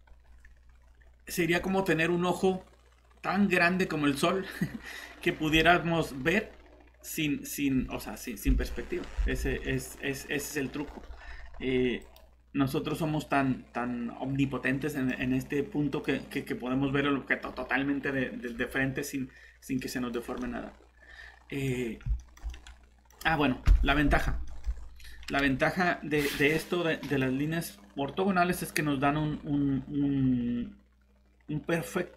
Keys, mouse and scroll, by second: 0.2 scroll up 1, 0.6 scroll down 1, 1.2 scroll up 1, 1.5 typing, 2.4 click, 5.9 scroll up 1, 6.1 typing, 8.6 alt+Tab, 9.2 alt+Tab, 12.0 click, 12.9 middle click, 15.9 click, 16.8 scroll up 1, 19.8 middle click, 20.1 scroll down 1, 20.3 scroll up 1, 20.4 middle click, 21.7-22.0 scroll up 1, 22.2 middle click, 23.6 shift+1, 24.7 scroll down 1, 27.1 click, 29.1 scroll down 1.